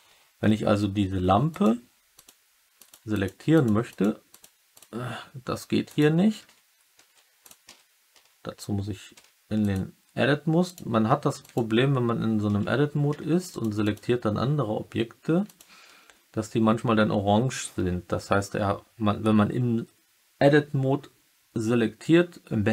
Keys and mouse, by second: 1.4 click, 2.1 click, 2.7 click, 3.0 click, 3.5 click, 3.9 click, 4.3 typing, 5.8 click, 6.3-7.9 typing, 8.1 Tab, 9.5 click, 9.9 Tab, 10.8 Tab, 11.4 click, 12.4 Tab, 13.0 Tab, 13.4 click, 13.8-15.5 drag, 15.8 Tab.